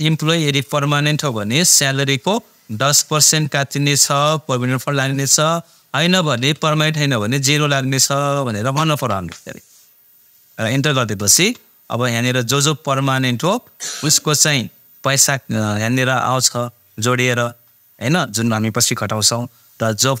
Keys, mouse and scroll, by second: 3.8 shift+Num_Lock, 4.1 shift+5, 6.4 ,, 9.0 shift+0, 16.1 click.